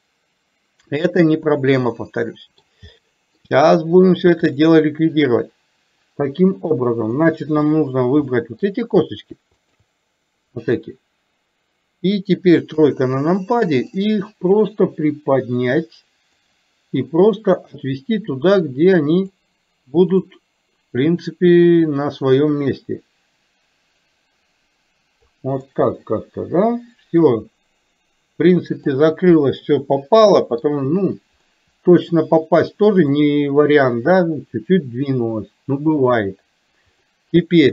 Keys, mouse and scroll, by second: 0.1-2.7 middle drag, 3.0-3.3 shift+middle drag, 4.5-6.0 drag, 6.8 middle click, 8.3 middle click, 9.7 shift+click, 12.8 KP_3, 14.2-16.6 drag, 17.5-19.5 drag, 20.2 click, 22.5-25.5 drag, 25.7-29.0 middle drag, 29.6-30.6 middle drag, 31.5-33.2 middle drag, 37.1 click.